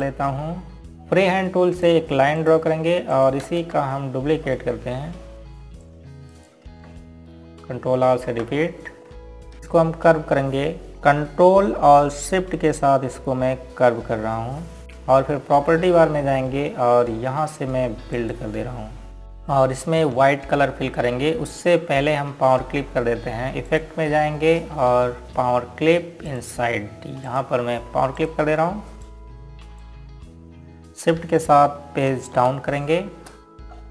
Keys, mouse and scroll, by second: 0.0 click, 0.8 Delete, 0.9 click, 3.4 click, 4.1 click, 4.8 ctrl+click, 5.2 space, 6.1 scroll up 1, 7.5 click, 8.0 ctrl+right click, 8.5-9.4 typing, 9.5 scroll up 1, 10.2 scroll down 1, 14.8 q, 19.8 click, 22.1-24.2 scroll down 1, 25.4 click, 28.0 click, 29.9 click, 30.7 click.